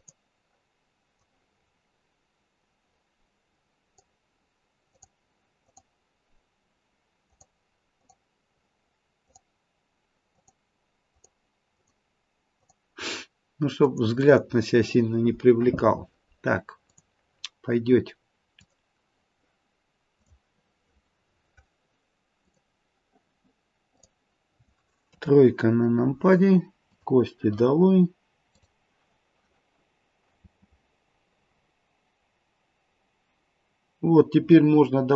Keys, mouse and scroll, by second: 16.8 click, 18.8 click, 22.5 click, 23.9 click, 25.0 KP_3, 26.9 click, 28.5 click, 30.4 space.